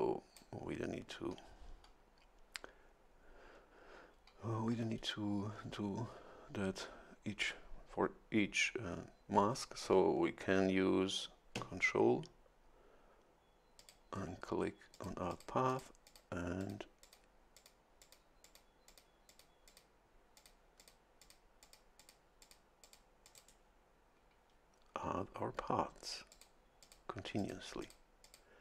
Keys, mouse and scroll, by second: 13.8 ctrl+click, 14.9 click, 15.3 click, 15.7 click, 16.1 click, 16.6 click, 17.0 click, 17.6 click, 18.0 click, 18.4 click, 18.9 click, 19.3 click, 19.7 click, 20.4 click, 20.8 click, 21.2 click, 21.6 click, 22.0 click, 22.4 click, 22.8 click, 23.2 click, 23.3 right click, 26.3 click, 26.8 click, 27.4 click, 27.8 click, 28.2 click.